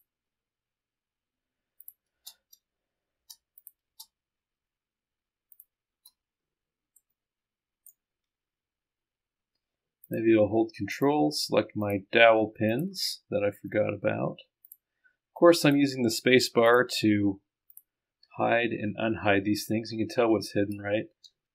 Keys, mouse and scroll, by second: 1.9 click, 2.4 space, 3.2 space, 3.6 right click, 4.0 space, 5.6 click, 6.2 space, 7.0 middle click, 7.2-8.3 right drag, 8.3-9.0 scroll down 1, 9.0-10.0 scroll up 1, 10.1 click, 11.0 ctrl+click, 11.9 ctrl+click, 13.1-13.7 scroll down 2, 13.7-14.4 scroll up 2, 14.7 ctrl+click, 15.6 ctrl+click, 16.7 ctrl+click, 17.7 ctrl+click, 18.6-19.7 scroll up 2.